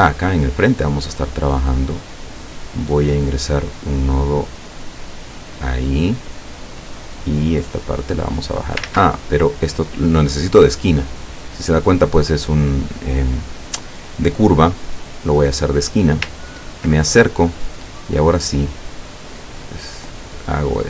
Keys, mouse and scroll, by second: 3.5 click, 3.8 click, 5.0 click, 6.8-8.6 drag, 8.9 ctrl+z, 9.3 ctrl+click, 15.1 click, 16.5 ctrl+scroll up 2, 17.5 click, 18.9-20.8 drag.